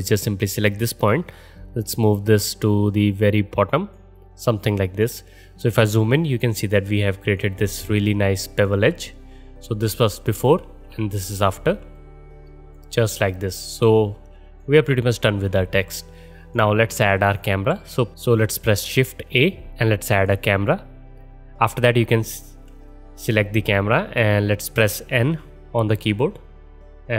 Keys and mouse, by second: 0.1-17.3 drag, 9.7 ctrl+z, 10.7 ctrl+shift+z, 17.3-18.9 middle drag, 18.9 shift+a, 25.9 n.